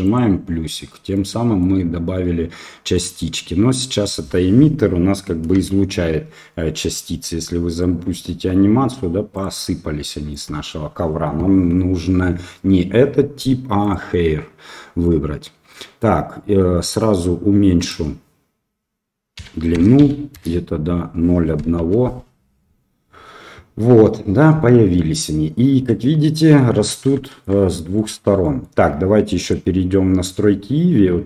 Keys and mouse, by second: 0.0 click, 1.1-1.6 middle drag, 2.9 middle click, 5.6 shift+a, 7.7 click, 9.3 click, 13.8-15.0 drag, 15.0 middle click, 17.8-20.9 drag, 21.7 KP_1, 25.8-26.2 middle drag, 27.2 shift+middle drag, 27.6-27.9 middle drag, 28.4 middle click, 29.4 click.